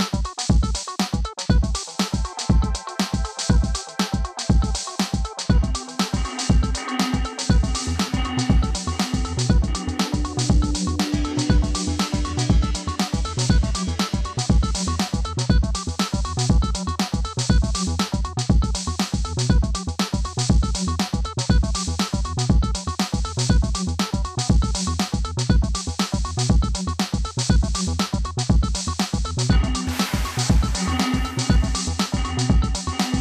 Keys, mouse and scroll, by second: 0.4-2.6 drag, 2.6 scroll down 1, 3.2-5.1 drag, 5.1 scroll up 1, 5.7 click, 8.1 click, 8.2 ctrl+click, 8.4 ctrl+c, 8.8 click, 9.0 scroll down 1, 9.6 click, 11.0 Caps_Lock, 12.6-13.6 typing, 13.4 click, 14.4 ctrl+click, 14.7 ctrl+g, 16.1 click, 21.7-22.5 typing, 22.7 click, 23.1 ctrl+z, 23.2-24.8 drag, 24.8 scroll down 1, 25.1-26.3 drag, 26.5 scroll up 1, 26.6 click, 27.4 ctrl+click, 27.7 ctrl+c, 27.9 click, 28.1 ctrl+v, 28.5-30.4 drag, 30.8 typing, 31.3 click, 31.8 ctrl+g, 32.3 click.